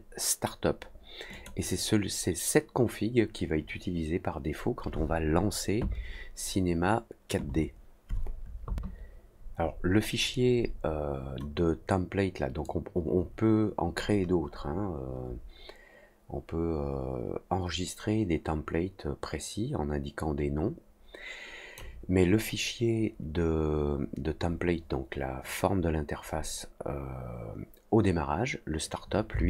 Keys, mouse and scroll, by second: 1.3 click, 12.6-21.7 drag.